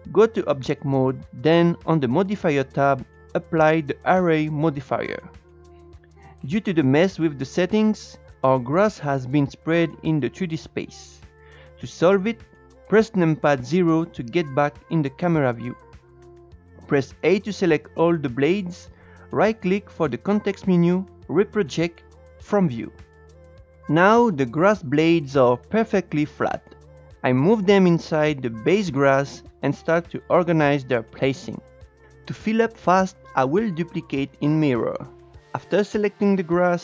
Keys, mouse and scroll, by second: 0.8 Tab, 2.4 click, 5.1-6.9 drag, 6.9 Tab, 8.1-11.9 middle drag, 14.4 KP_0, 17.1 a, 19.8-24.0 right drag, 24.0 scroll down 2, 24.2-26.0 middle drag, 26.0 KP_0, 26.6 Tab, 27.5 g, 29.3 scroll up 3, 29.3 shift+middle click, 29.5 click, 29.8-31.5 typing, 30.2 click, 30.7 click, 31.0 click, 31.2 click, 31.4 click, 31.8 scroll down 1, 31.8 shift+middle click, 32.0 shift+right click.